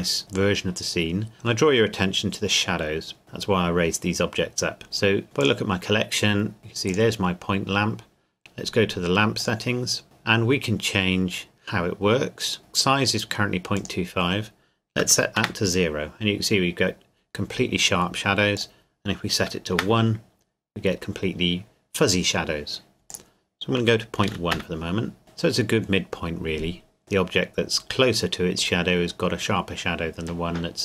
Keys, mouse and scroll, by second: 0.0-0.3 scroll up 1, 0.3 middle click, 2.9 scroll up 1, 4.8-5.4 scroll up 1, 5.4 click, 6.9 click, 9.4 click, 13.8 click, 15.0 KP_0, 15.4 KP_Enter, 18.6 click, 19.4 KP_1, 19.8 KP_Enter, 23.1 click, 24.2 KP_Decimal, 24.3 KP_1, 24.5 KP_Enter, 27.0 middle click, 27.4 scroll up 1.